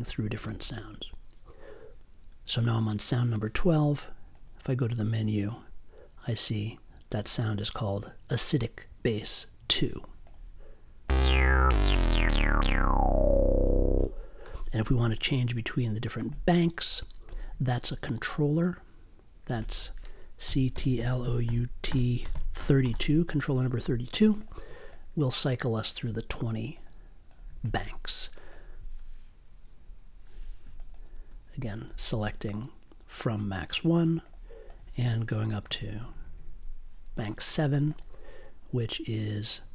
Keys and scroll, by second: 20.4-23.3 typing, 30.6 space, 35.5 Up.